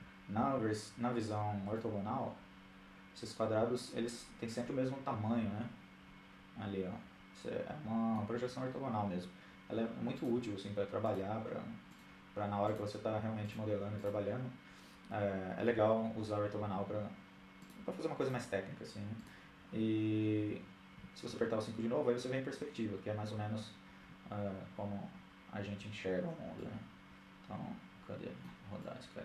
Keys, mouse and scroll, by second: 0.7-2.0 middle drag, 9.1-14.3 right drag, 16.6-19.3 right drag, 19.8 KP_5, 25.4-26.6 middle drag, 27.5-28.9 middle drag.